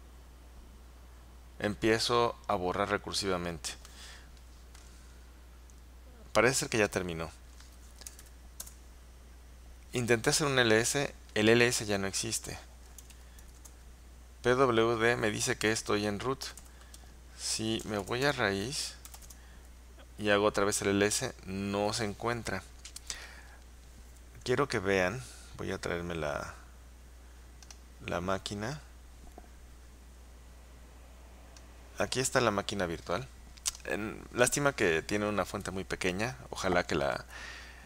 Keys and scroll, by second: 8.1-8.8 typing, 12.9-14.0 typing, 16.3-19.7 typing, 18.4 Return.